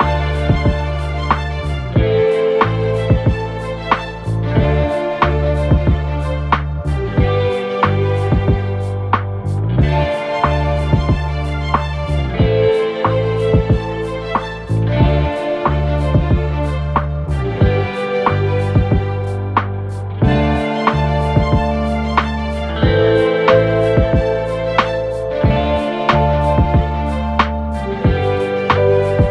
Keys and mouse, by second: 6.9 Tab, 12.0-22.1 middle drag, 12.4 Tab, 13.7 KP_1, 14.0 KP_3, 14.1 shift+d, 15.3 s, 16.4-18.9 typing, 20.2 s, 21.3 r, 22.1-23.5 drag, 22.9 r, 23.5-29.3 middle drag, 23.5 g.